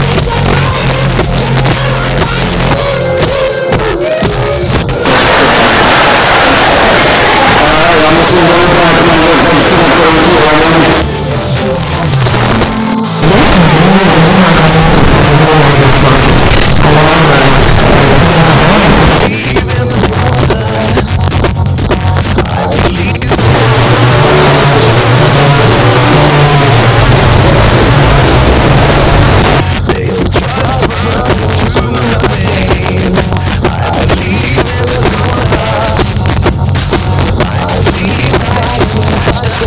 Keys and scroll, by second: 0.0 Down, 0.2 Return, 10.9 Page_Down, 19.1 Page_Down, 29.4 Page_Down.